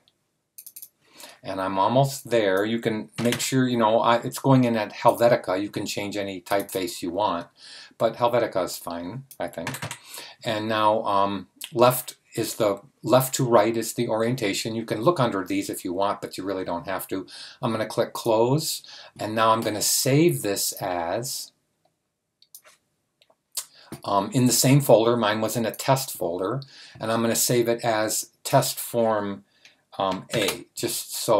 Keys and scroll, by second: 3.1 typing, 5.3 typing, 9.6 typing, 11.8 typing, 30.2 a.